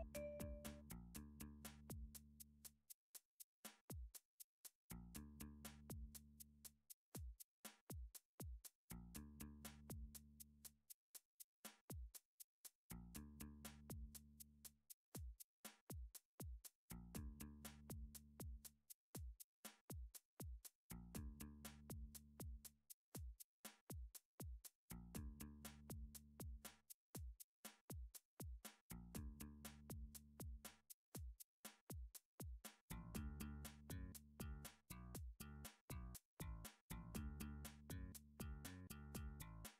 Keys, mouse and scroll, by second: 0.3 ctrl+z, 0.9 3, 2.1 a, 2.7 click, 3.1 click, 4.0 click, 4.2 click, 5.8 click, 6.4 click, 7.9 click, 8.5 click, 8.9 click, 10.6 click, 10.7 right click, 11.8 right click, 13.3 click, 14.1 g, 16.6 click, 16.9 click, 17.8 7, 22.1 s, 22.7 y, 23.6 click, 24.4 1, 25.4 r, 28.1 click, 28.4 7, 29.1 r, 29.8 right click, 31.3 scroll, 31.9 7, 32.9 g, 33.7 click, 35.6 middle click, 36.0 alt+z, 36.5 3, 38.4 r.